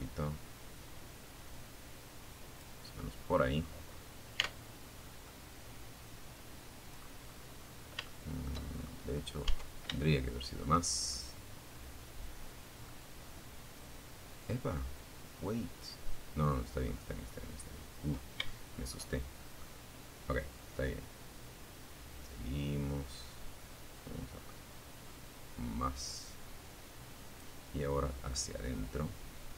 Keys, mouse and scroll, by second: 1.2-2.4 scroll down 2, 2.6 Tab, 3.2 scroll down 1, 3.4-5.4 middle drag, 5.5-6.0 scroll up 1, 6.2 shift+middle click, 6.9-7.4 shift+scroll up 3, 7.6 Tab, 8.2 shift+click, 8.8 shift+middle click, 9.3-15.2 shift+middle drag, 15.4-16.0 scroll up 2, 16.3-16.6 scroll down 3, 16.6 shift+middle click, 17.4 shift+middle click, 18.8-21.1 drag, 21.1-21.6 scroll up 2, 22.0 scroll up 1, 22.0 scroll down 1, 22.6 scroll down 1, 22.8-24.0 scroll up 1, 24.8 scroll down 1, 26.6-29.0 drag, 29.3 scroll down 2.